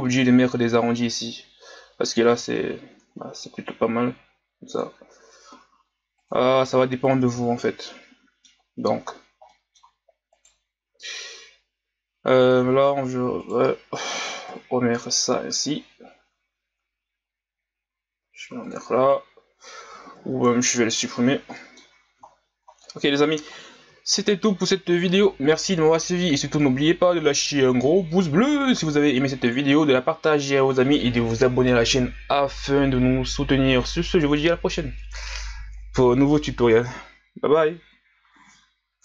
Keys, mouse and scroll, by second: 0.1-0.4 middle drag, 0.4-1.0 scroll up 1, 1.0-2.3 scroll up 1, 2.3-3.2 ctrl+scroll up 11, 3.6-4.8 scroll down 2, 4.8-6.9 drag, 6.9-7.4 scroll down 3, 7.4 a, 7.7-8.9 middle drag, 8.9-9.5 scroll down 3, 9.5-10.3 middle drag, 10.3 right click, 12.6 s, 14.5 KP_1, 15.5 g, 20.6 Delete, 21.5 middle click, 21.8 scroll up 4, 22.2 scroll down 5, 22.8-24.1 middle drag, 24.1 scroll down 4, 24.7-27.7 middle drag.